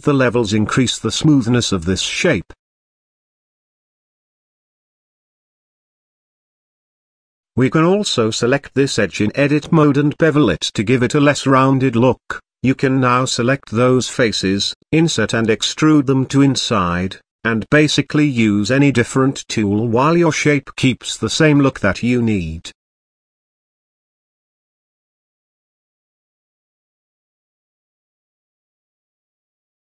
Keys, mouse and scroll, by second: 1.7-4.4 middle drag, 5.3 Tab, 7.7 click, 8.6 click, 8.8 alt+click, 9.8 ctrl+b, 19.4 Tab, 19.8-22.1 middle drag, 22.1 Tab, 22.8-24.5 middle drag, 24.5 ctrl+r, 27.5 click, 28.2 click, 28.8 shift+click, 29.4 shift+click.